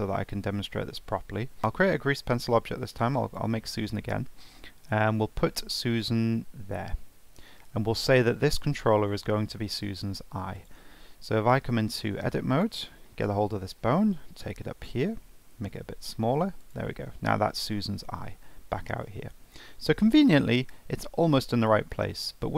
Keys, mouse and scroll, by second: 0.0 Tab, 1.6 shift+a, 4.5 alt+middle click, 6.1 g, 9.2-10.5 middle drag, 10.5 click, 11.1 middle click, 11.7 Tab, 12.5 click, 13.3 alt+middle click, 13.9 g, 15.4 s, 18.1 Tab, 19.0-19.4 shift+middle drag, 19.4-21.5 scroll up 2, 21.5-21.9 scroll up 1, 21.9-22.2 shift+middle drag, 22.2-22.5 scroll up 4.